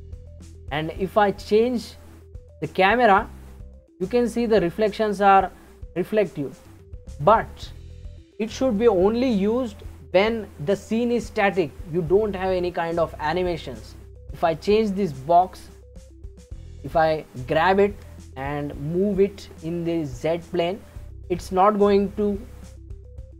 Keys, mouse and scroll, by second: 0.7-3.7 middle drag, 14.3 click, 17.5 g.